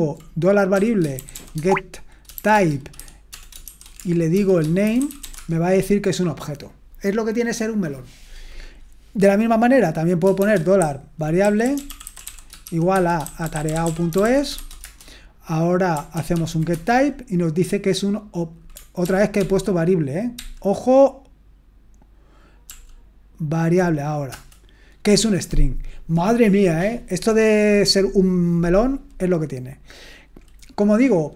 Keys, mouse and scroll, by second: 0.5-5.7 typing, 10.4-15.0 typing, 16.1 ctrl+p, 16.3 ctrl+p, 16.7 Return, 19.0 ctrl+p, 19.4 ctrl+p, 20.4 ctrl+p, 22.7 ctrl+p, 24.3 Return.